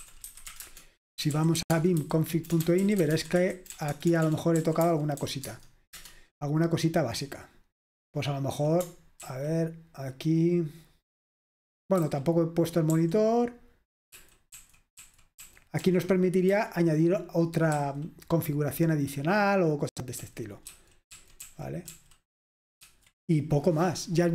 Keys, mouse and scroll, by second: 0.0-6.0 typing, 7.4-8.9 j, 9.3 ctrl+d, 12.1 ctrl+d, 12.1 typing, 13.0 ctrl+u, 14.2 ctrl+d, 14.6 ctrl+d, 14.6 typing, 15.1 ctrl+d, 15.5 ctrl+d, 21.2 ctrl+d.